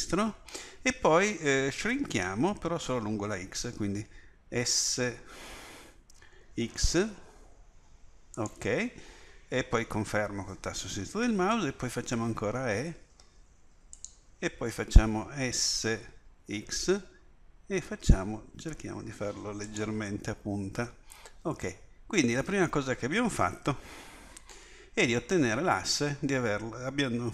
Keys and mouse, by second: 4.8 s, 11.9 e, 15.4 s, 26.3 middle click.